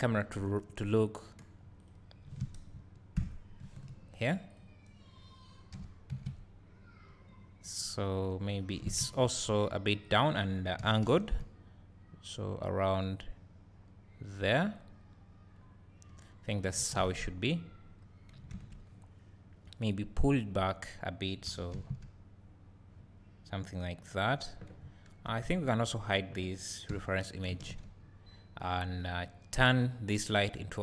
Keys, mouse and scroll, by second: 0.0-1.9 drag, 3.2 ctrl+alt+KP_0, 4.6 click, 5.8 g, 7.9 click, 8.8 r, 10.1 click, 10.8 g, 14.8 click, 15.7-16.7 scroll up 1, 21.5 g, 24.3 click, 27.0 h, 28.8 click.